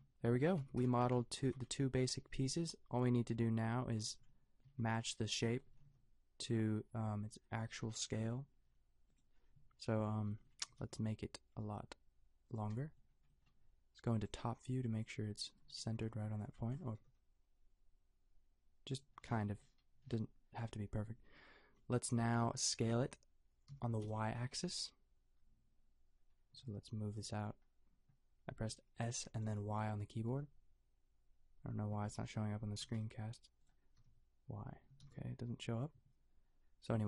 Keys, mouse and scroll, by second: 0.6 Tab, 1.4 a, 4.0 Tab, 4.7 a, 5.7 s, 10.6 g, 16.9 g, 23.7 s, 29.9 s, 32.8 s, 34.0 y, 34.9 s.